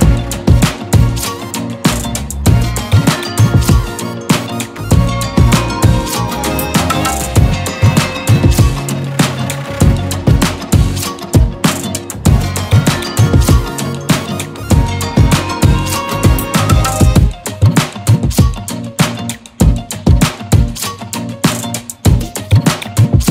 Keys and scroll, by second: 0.4 ctrl+z, 1.3 ctrl+z, 2.1 ctrl+z, 4.1 ctrl+z, 7.2 ctrl+z, 16.1 ctrl+z, 20.5 ctrl+z, 21.4 ctrl+z, 23.0 ctrl+z.